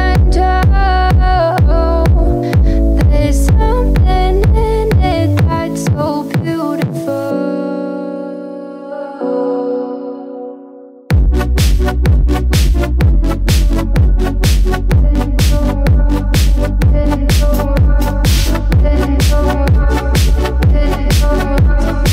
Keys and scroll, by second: 7.9 9.